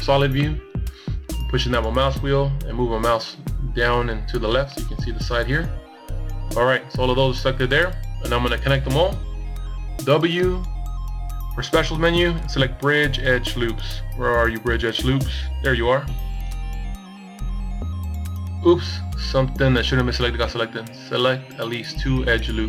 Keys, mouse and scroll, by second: 1.3-4.3 scroll down 1, 5.8 w, 18.5 middle click, 19.7 middle click, 20.1 middle click, 21.6 middle click.